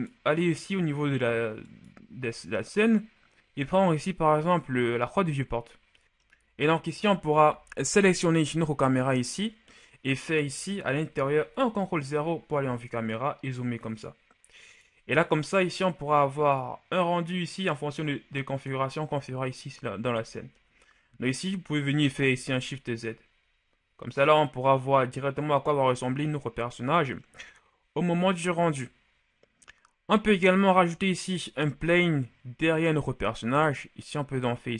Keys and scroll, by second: 11.5 ctrl+KP_0, 22.3 shift+z, 31.5 shift+a.